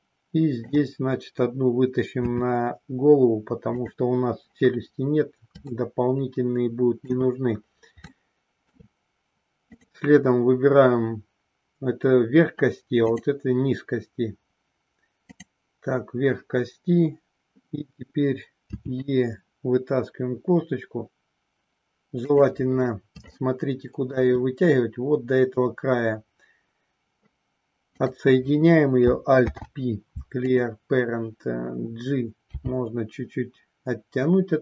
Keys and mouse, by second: 2.2 e, 5.7-7.0 shift+middle drag, 8.1 shift+middle click, 13.0 click, 18.7 e, 22.2 click, 23.3 shift+middle click, 28.0 click, 29.3 alt+p, 32.5 g.